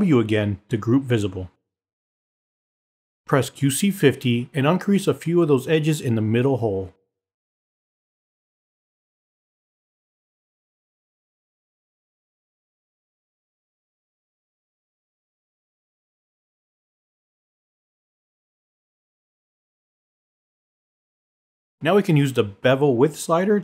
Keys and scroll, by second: 2.8 w.